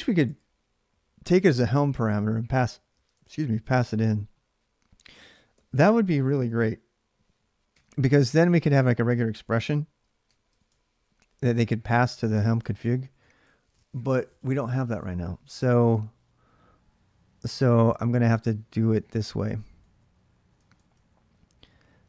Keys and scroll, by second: 0.0 alt+Tab, 2.7 alt+Tab, 5.3 alt+Tab, 5.3 ctrl+c, 6.2 ctrl+a, 7.5 1, 8.1 ctrl+[, 8.1 j, 9.1 ctrl+a, 9.4-20.7 typing, 10.0 ctrl+[.